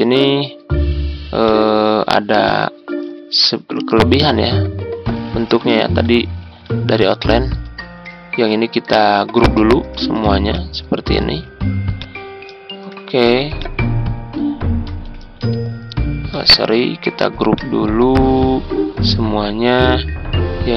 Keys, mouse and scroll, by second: 2.4 click, 4.5 ctrl+scroll up 1, 5.6 ctrl+scroll down 1, 6.9 alt+click, 10.0 ctrl+g, 10.4 click, 11.3 ctrl+z, 11.9 click, 12.6 ctrl+scroll down 1, 13.5 click, 15.2 ctrl+g, 16.3 ctrl+z, 17.4-20.4 drag.